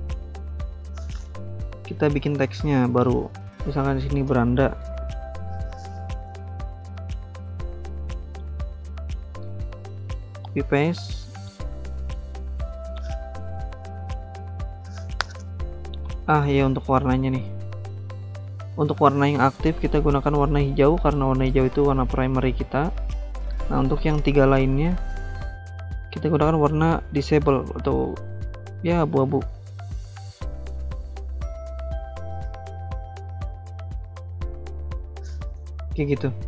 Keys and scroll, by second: 4.0-5.5 typing, 9.1 ctrl+c, 9.3 ctrl+v.